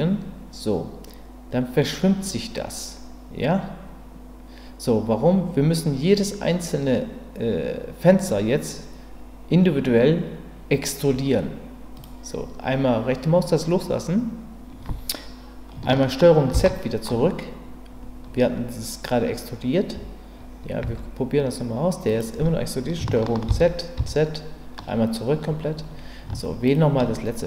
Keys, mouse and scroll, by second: 16.5 ctrl+z, 20.8 g, 23.5 ctrl+z, 24.7 ctrl+z, 26.6 shift+click.